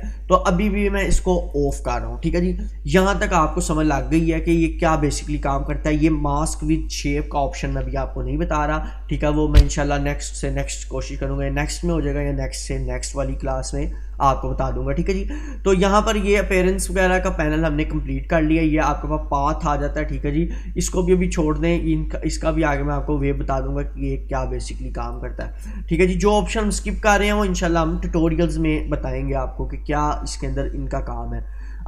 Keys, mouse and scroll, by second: 19.5-21.4 scroll up 2, 22.7-23.7 drag, 31.5-31.8 scroll down 1.